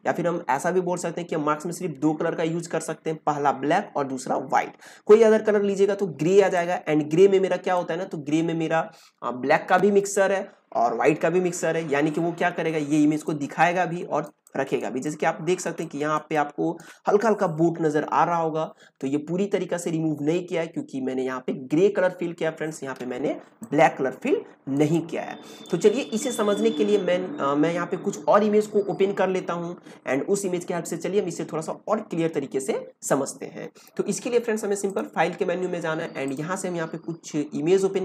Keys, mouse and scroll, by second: 6.5-9.9 drag, 13.0 space, 13.3-15.0 ctrl+drag, 15.0 ctrl+click, 16.2-19.9 ctrl+drag, 23.3 ctrl+click, 23.9 ctrl+space, 24.8 ctrl+space, 25.0-27.6 drag, 34.9 click.